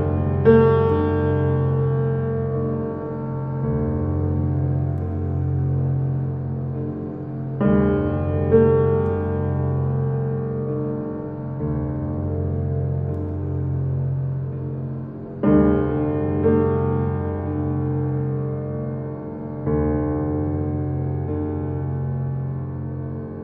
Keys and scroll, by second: 9.1 2, 9.3 0, 9.5 Return, 13.9 8, 14.1 Return, 20.4 ctrl+z.